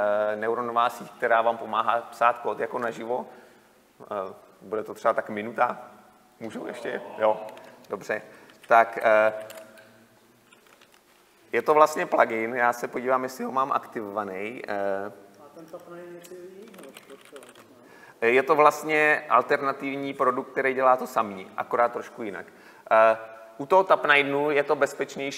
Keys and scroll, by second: 9.0 Delete, 11.6 Delete.